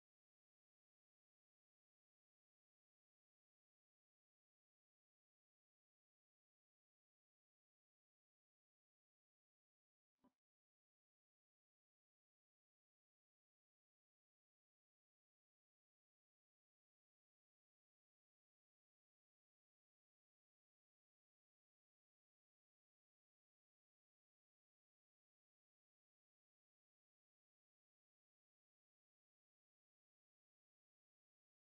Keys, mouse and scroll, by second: 3.6 middle click, 4.3 alt+click, 5.1-5.4 alt+scroll up 1, 7.0 scroll up 1, 7.7 alt+click, 8.6-9.0 scroll up 1, 10.6 ctrl+click, 11.4 scroll up 1, 11.8 alt+click, 12.4 alt+middle click, 12.8 scroll down 1, 13.2 alt+click, 14.1 alt+middle click, 14.5 alt+click, 15.3 BackSpace, 16.0-16.4 scroll up 1, 18.1 ctrl+click, 18.9 scroll down 1, 19.1 alt+middle click, 19.5 alt+click, 20.0 ctrl+click, 20.5 BackSpace, 21.1 alt+middle click, 21.2-21.6 alt+scroll up 1, 24.3 ctrl+click, 26.0-26.4 scroll up 1, 26.4 alt+click, 27.1 BackSpace, 28.6 scroll down 1, 28.7 alt+middle click, 28.9 alt+scroll up 1, 29.1 scroll down 1, 29.3 alt+click, 31.0 alt+middle click, 31.4 alt+click.